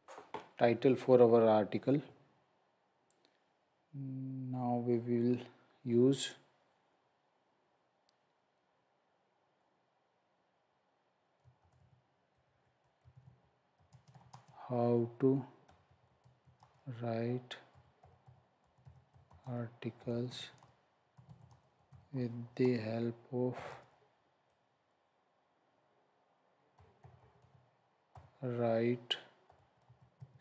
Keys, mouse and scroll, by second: 11.3-23.7 typing, 26.5-28.1 typing, 29.2-30.4 typing.